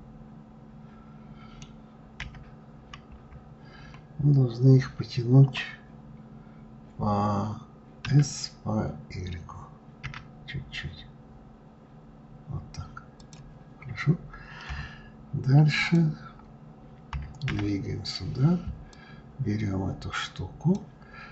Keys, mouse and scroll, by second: 1.8 KP_1, 2.8 KP_3, 14.3 KP_3, 15.4 click, 16.8 KP_3, 17.1 KP_1, 18.6 click.